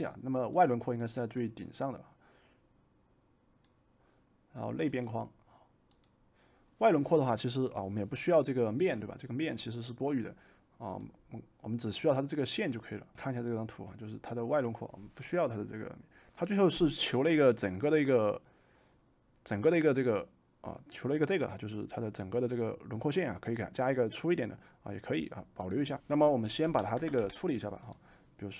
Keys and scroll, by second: 26.6 v, 27.2 v.